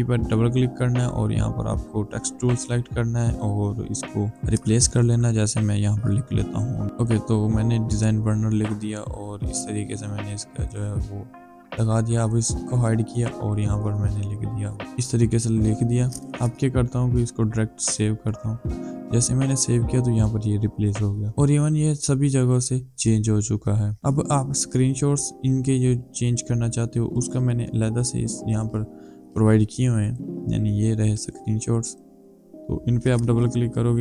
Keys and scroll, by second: 6.8 shift+d.